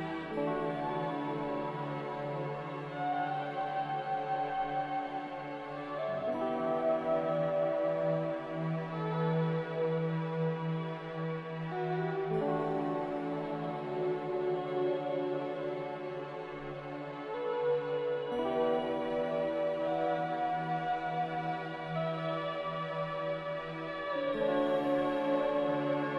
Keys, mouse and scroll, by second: 1.2 z, 3.4 2, 3.6 Return, 7.5 s, 9.5-13.5 typing, 12.1 Tab, 20.8 z.